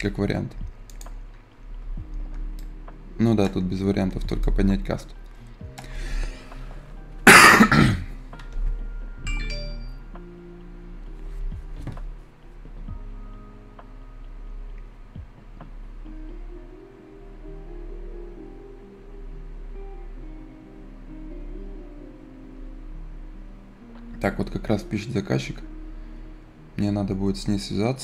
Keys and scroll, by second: 1.7 Escape, 4.2 Escape.